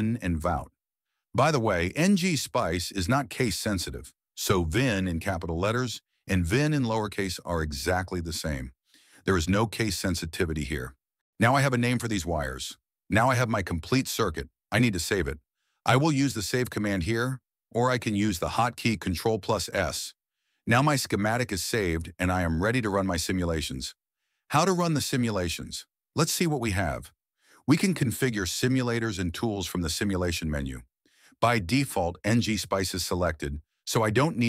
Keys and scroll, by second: 0.2 Right, 0.4-2.0 typing, 8.6-9.7 typing.